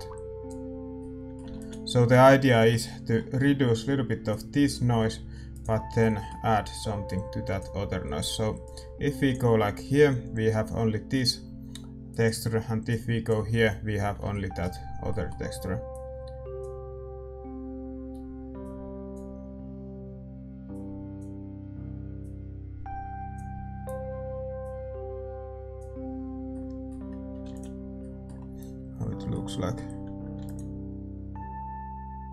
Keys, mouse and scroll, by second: 1.0-2.2 middle drag, 1.6 ctrl+s, 4.4-10.5 drag, 7.1 right click, 12.9-14.6 drag, 14.6-17.8 middle drag, 15.9 click, 16.0 right click, 16.3-17.8 right drag, 18.6-23.3 drag, 23.7-32.3 drag.